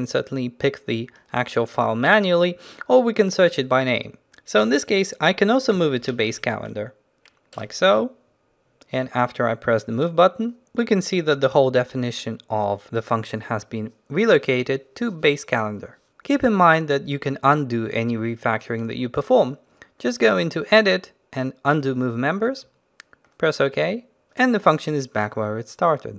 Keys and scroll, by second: 23.5 ctrl+z.